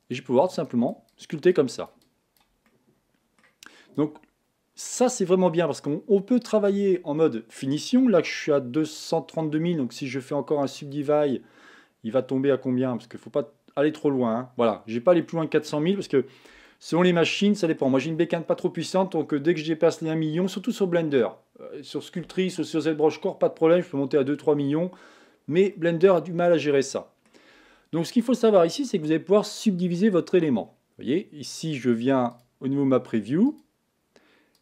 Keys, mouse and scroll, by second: 2.7 middle click, 3.5-3.9 scroll up 1, 3.9-15.2 drag, 15.2-33.4 middle drag, 33.4-34.6 drag.